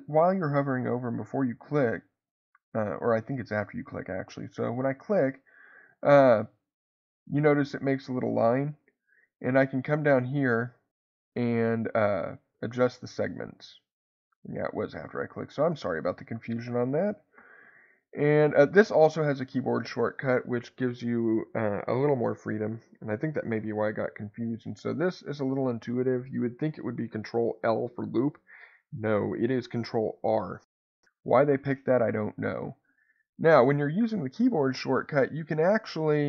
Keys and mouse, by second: 4.7 click, 12.3 click, 12.5 click, 12.7 click, 13.0 click, 14.5 click, 15.4 click, 29.8 ctrl+r.